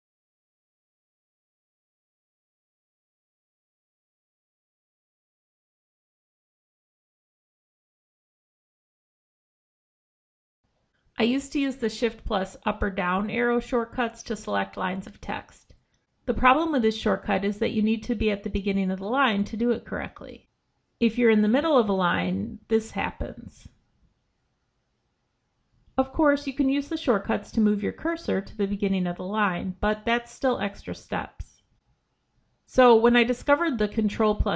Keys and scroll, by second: 2.4 ctrl+v, 21.8 shift+Down, 29.5 alt+Left, 31.7 shift+Down.